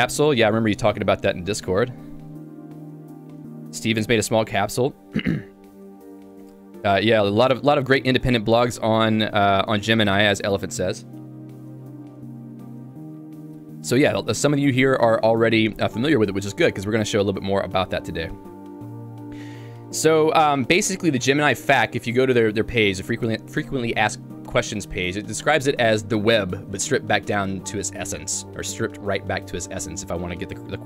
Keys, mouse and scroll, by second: 22.6 l.